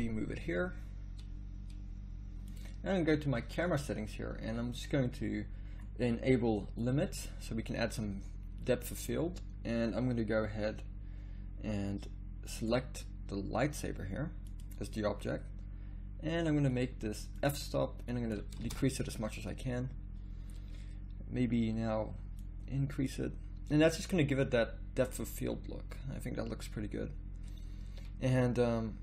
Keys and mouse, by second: 0.5 g, 6.8-9.0 drag, 12.6-14.6 drag, 16.6-18.9 drag, 18.9 shift+z, 22.4-24.9 drag.